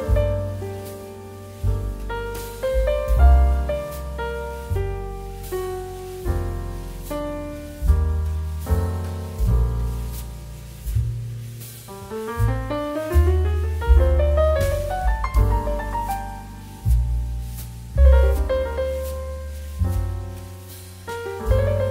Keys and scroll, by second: 0.7 space, 14.0 x, 20.3 s.